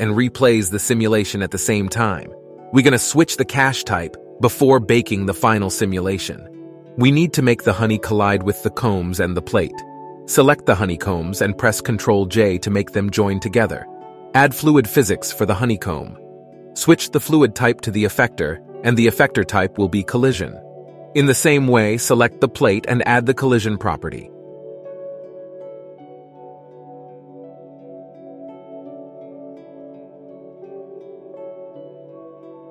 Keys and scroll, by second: 13.8 ctrl+j.